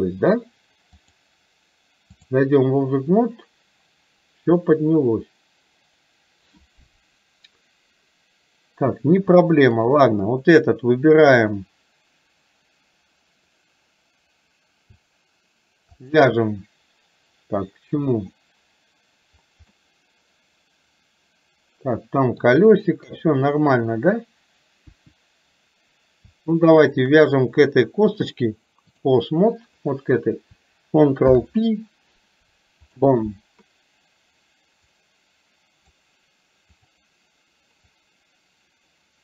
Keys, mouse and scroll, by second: 1.1-2.4 drag, 16.1 shift+click, 19.8-22.6 middle drag, 23.1 KP_3, 24.9 KP_1, 28.3-29.2 drag, 29.8 click, 35.1-36.1 drag, 38.1-39.2 drag.